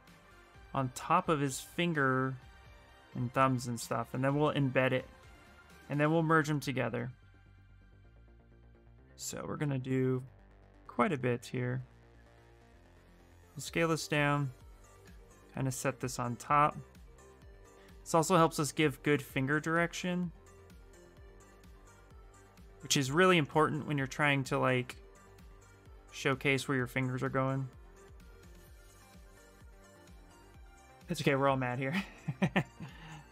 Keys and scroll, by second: 29.6 ctrl+z.